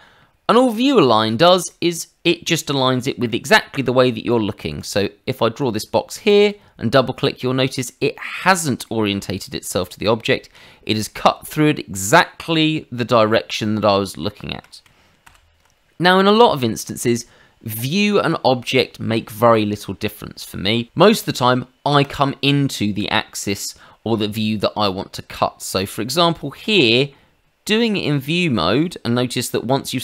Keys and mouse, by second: 1.2 shift+middle click, 1.7 middle click, 4.8 click, 6.2 click, 6.4 click, 8.8 middle click, 10.3 shift+middle click, 11.0 middle click, 14.4 shift+middle click, 15.2 ctrl+z, 18.1 click, 19.3 Escape, 22.0 click, 25.8 click, 26.6 middle click, 29.2 middle click, 29.9 shift+middle click.